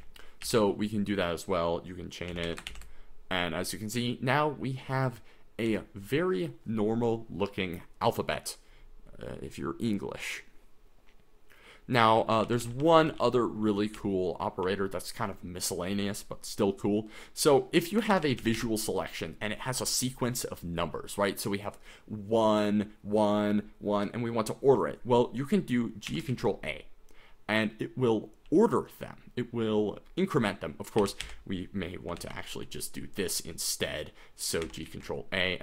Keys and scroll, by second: 0.0-0.4 typing, 2.1-3.2 typing, 5.7 k, 12.2-14.8 typing, 17.0-19.0 typing, 26.1 g, 26.3 ctrl+a, 28.5 k, 30.8-32.8 typing, 34.6 g, 34.8 ctrl+a.